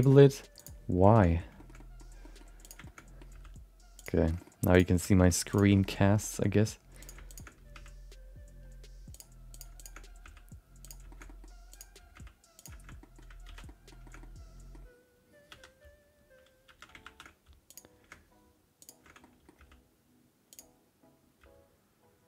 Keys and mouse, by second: 1.0 shift+middle click, 1.3 middle click, 1.5 shift+middle click, 1.7 middle click, 2.2 middle click, 2.6 click, 2.8 shift+middle click, 3.3 g, 4.2 middle click, 4.3 middle click, 4.7 click, 5.0 g, 5.7 middle click, 5.9 middle click, 6.2 middle click, 6.4 middle click, 7.0 click, 7.3 shift+click, 7.5 g, 9.5 click, 9.7 shift+click, 10.0 g, 11.1 middle click, 11.2 middle click, 11.7 click, 11.9 g, 13.0 middle click, 13.4 alt+z, 13.6 middle click, 14.0 shift+middle click, 14.2 middle click, 15.5 3, 16.6 1, 17.0 shift+2, 17.6 click, 19.2 middle click, 19.5 g, 21.4 g.